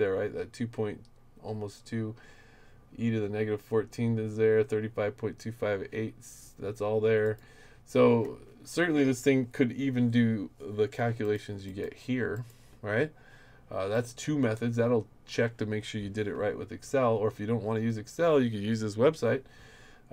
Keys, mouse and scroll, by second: 7.2 click, 11.2 click, 11.7 click, 12.3 click, 13.9 click, 19.3 middle click, 19.5-20.1 scroll down 9, 19.5 middle click, 19.9 middle click.